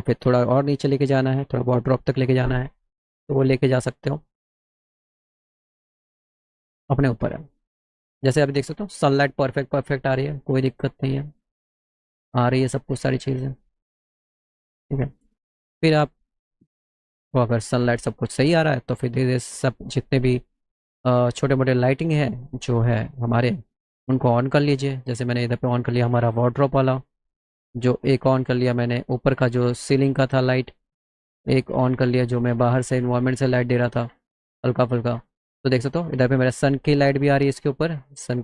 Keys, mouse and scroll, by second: 4.1 middle click, 5.4 middle click, 6.0 middle click, 21.8 click, 24.4 click, 28.0 click, 31.7 click, 34.9 click.